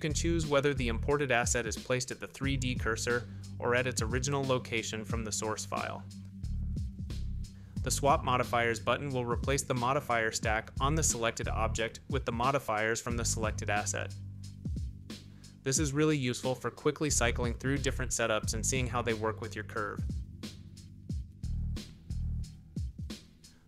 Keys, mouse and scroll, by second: 0.5 click, 2.6 click, 3.9 click, 5.8 click, 6.5 click, 7.6 click, 8.3 click, 9.3 click, 12.5 middle click, 14.7-16.1 drag, 16.1 middle click, 19.4-19.7 middle drag, 20.1-20.9 middle drag, 21.2-21.8 shift+middle drag, 23.1 click.